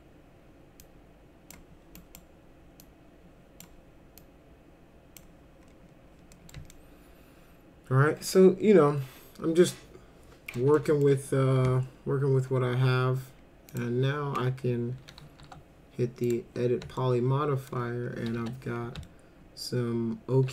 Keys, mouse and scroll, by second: 0.8 click, 2.0 click, 2.8 click, 4.2 click, 6.3 middle click, 6.7-10.5 alt+middle drag, 10.8 alt+middle click, 13.7 click, 15.4 e, 16.2 click, 17.0 alt+middle click, 18.4 1, 19.0-20.5 alt+middle drag.